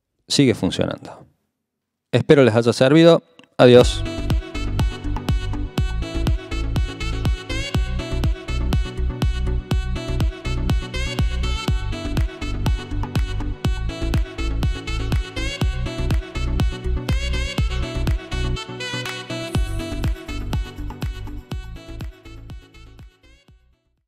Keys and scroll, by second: 0.0-0.3 typing.